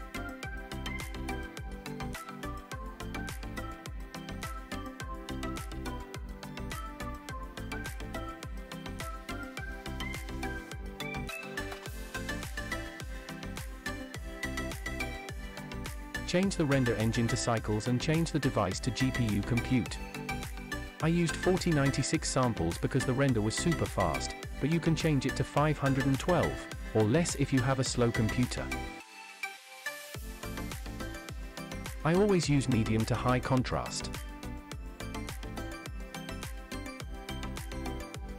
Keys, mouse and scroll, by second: 5.4 space, 5.4 click, 10.0 space, 12.1 click, 15.3 click, 16.9-18.3 drag, 19.8-21.2 drag, 27.5-28.2 scroll down 1, 28.6-29.6 scroll down 1, 29.6 click, 30.1-31.5 scroll down 2, 31.5 click, 31.5 scroll down 1, 32.7 click, 36.1-37.4 scroll up 2, 37.4-38.3 scroll up 3.